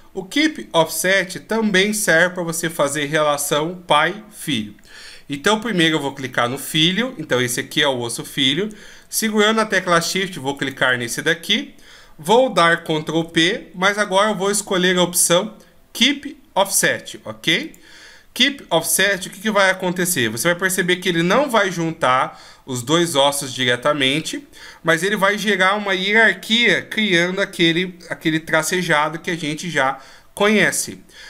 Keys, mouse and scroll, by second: 10.0 shift+right click, 12.7 ctrl+p, 30.2 click.